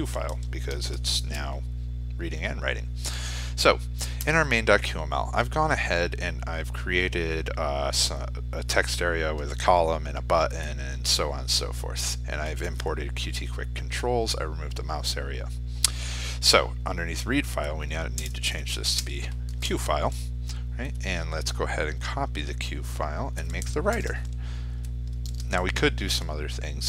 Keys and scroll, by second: 0.3 ctrl+s, 23.5 ctrl+c, 24.8 ctrl+v.